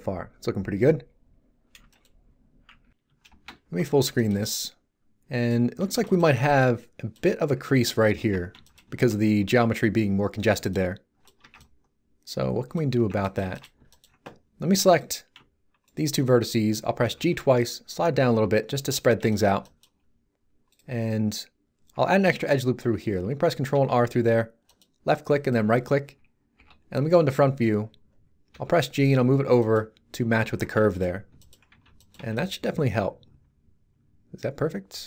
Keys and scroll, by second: 3.2 shift+space, 8.1 Tab, 11.4 Tab, 16.9 g, 23.7 ctrl+r, 26.5 1, 28.5 g, 30.4 Tab, 31.7 z.